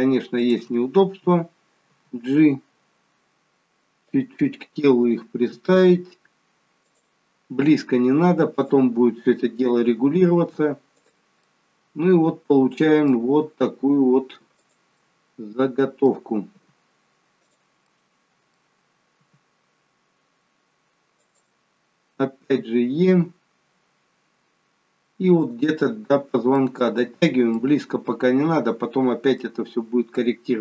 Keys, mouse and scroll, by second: 1.9 g, 5.1 click, 5.5 g, 8.6 click, 9.9 g, 11.4 middle click, 13.3 g, 15.0 middle click, 16.6 g, 17.9 middle click, 19.2 g, 26.6 middle click, 27.5 middle click, 29.8-30.2 scroll down 1, 30.2 middle click.